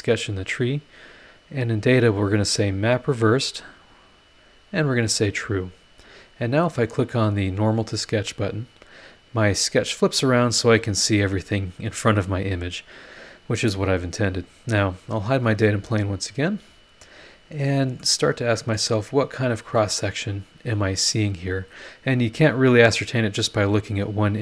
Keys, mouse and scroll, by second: 2.4 click, 3.5 click, 4.7 click, 5.6 click, 8.1 click, 9.2-9.5 scroll down 1, 9.7-10.4 scroll up 2, 11.1 scroll down 2, 11.8 scroll down 2, 12.4-12.7 scroll up 2, 15.3 click, 15.5 space, 16.3 scroll up 2, 18.0 middle click, 18.1 click, 18.9 scroll down 1.